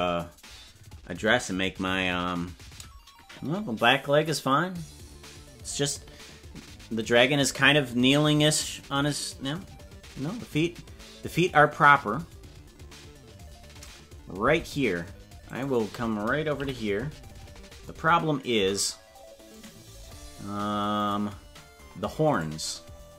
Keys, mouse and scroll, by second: 14.5 Tab, 15.5 right click, 16.6 KP_Decimal, 17.3-17.9 scroll down 10, 19.5-20.5 right drag, 21.0 click, 22.3 right click.